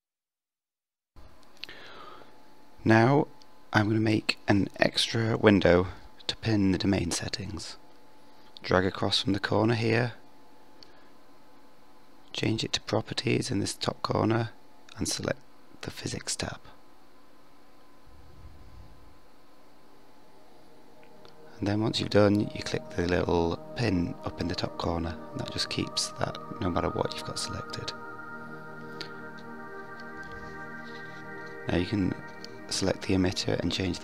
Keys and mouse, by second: 6.3-8.4 drag, 13.0-14.0 drag, 17.6 click, 18.9 click, 19.4 click, 31.0 click, 33.7-34.0 drag.